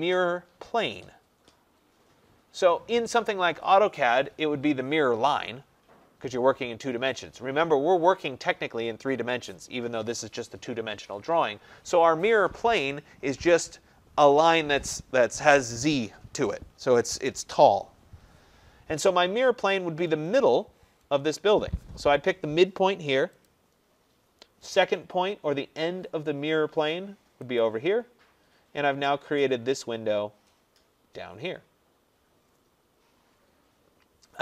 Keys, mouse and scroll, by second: 23.5 click, 27.6 click, 30.0 middle click, 30.0 middle click, 30.2 middle click.